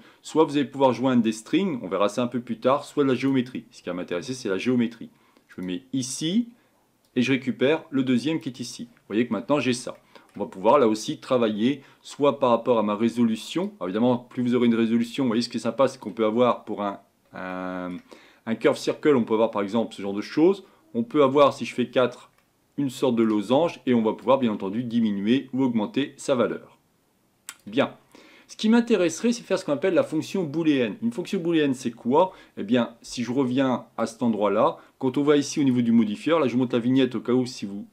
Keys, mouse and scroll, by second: 8.4 click, 13.8-22.4 drag, 22.4-24.9 middle drag, 24.9-27.2 drag, 28.0-28.5 scroll down 3, 28.5-29.4 middle drag, 29.4-29.9 scroll down 1, 29.9-34.0 middle drag, 34.0-35.6 drag.